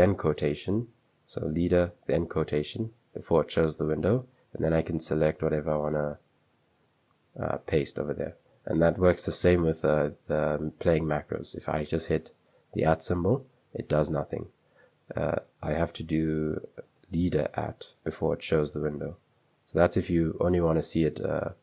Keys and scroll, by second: 2.2 typing, 4.8-7.7 typing, 12.4 typing, 14.0 Escape, 17.5 typing, 19.5 Escape, 19.7 typing, 20.7 super+1, 21.1 super+2, 21.1 typing.